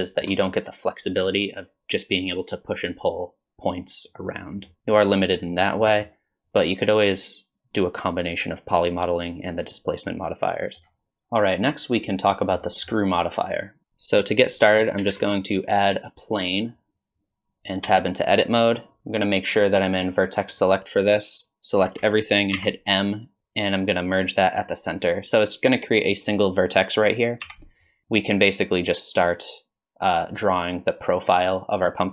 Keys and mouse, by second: 0.0 shift+middle drag, 4.7 middle click, 4.9-5.5 middle drag, 5.8 middle drag, 10.6 middle click, 12.7 middle drag, 15.0 shift+a, 17.9 Tab, 20.5 click, 21.9 a, 22.6 m, 27.4 KP_1, 29.4-32.1 drag.